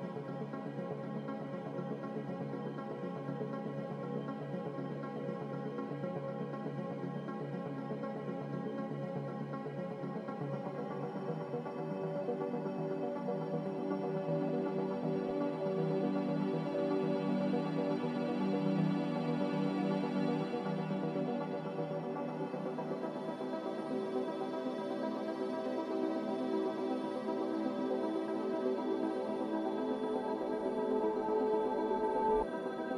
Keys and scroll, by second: 7.3 z, 12.1-12.9 typing, 15.8 Return, 27.8 a.